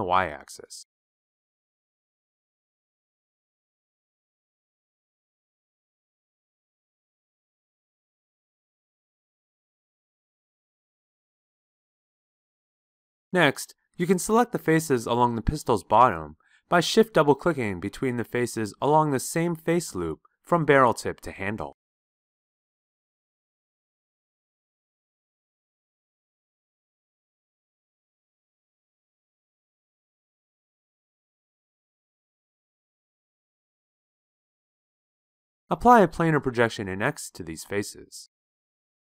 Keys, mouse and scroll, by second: 16.3-33.4 drag.